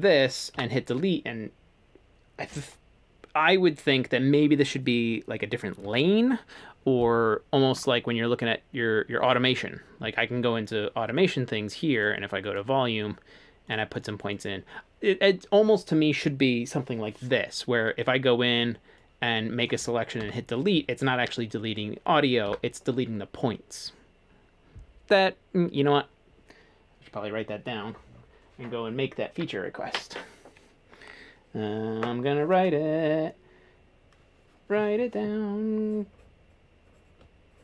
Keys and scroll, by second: 0.5 Delete, 5.8 super+z, 9.5 a, 20.2 Delete, 22.5 Delete.